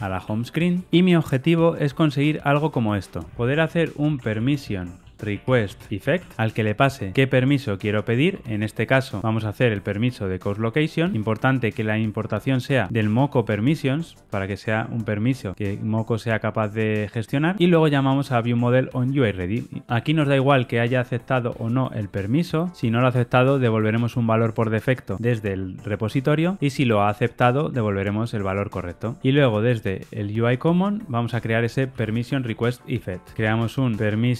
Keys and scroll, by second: 8.3 Tab, 31.9 super+n.